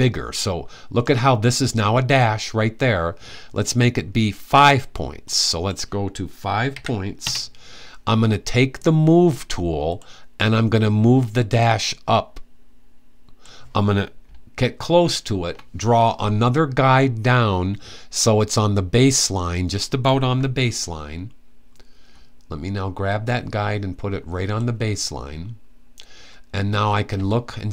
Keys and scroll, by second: 6.4 5.